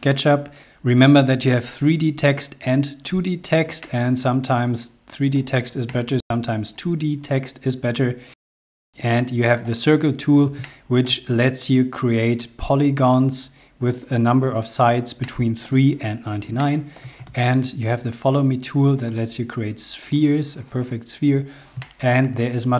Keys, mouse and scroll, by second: 0.6 scroll down 1, 0.9-1.3 scroll up 2, 3.4 middle click, 5.6 shift+middle click, 7.4 scroll down 1, 8.6 shift+middle click, 10.3 shift+middle click, 14.9 shift+middle click, 16.3 shift+middle click, 16.8 space, 17.3 scroll up 2, 18.6 click, 20.7-21.1 scroll down 2, 21.4 shift+middle click.